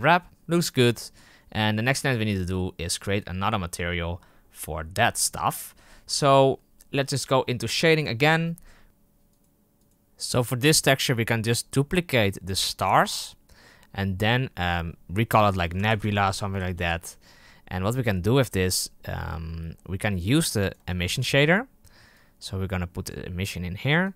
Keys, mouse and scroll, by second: 0.8 Tab, 8.0 click, 9.2-12.8 right drag, 12.8-17.2 drag, 19.4-20.3 middle drag, 20.3 click, 22.0-23.0 drag, 23.4 click.